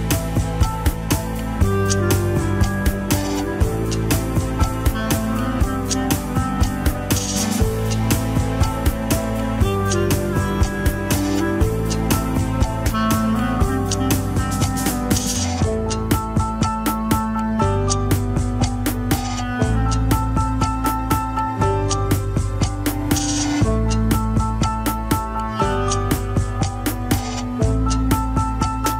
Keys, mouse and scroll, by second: 0.1-6.1 drag, 9.9 drag, 11.0 shift+click, 11.4 scroll up 2, 11.8-12.2 shift+middle drag, 12.2 click, 13.0 ctrl+Tab, 13.1 KP_3, 13.7 shift+middle drag, 13.9-14.2 scroll up 2, 14.2 alt+z, 14.8 click, 16.4 scroll up 3, 22.1 shift+middle click, 22.4-22.9 scroll up 5, 23.2 shift+click, 24.7 ctrl+l, 25.4 shift+click, 26.1 shift+click, 26.6 scroll down 6, 27.6-28.8 drag.